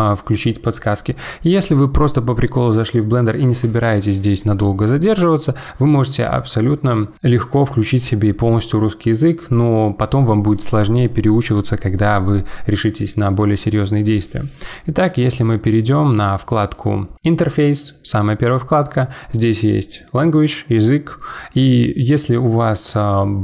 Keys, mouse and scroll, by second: 0.0-3.0 drag.